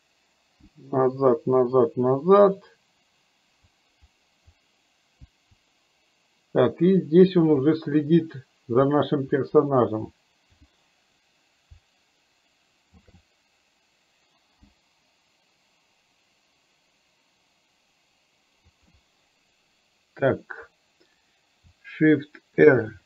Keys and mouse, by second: 9.0 Right, 13.0 shift+f, 18.7 Right, 21.7 shift+Right, 22.7 shift+r.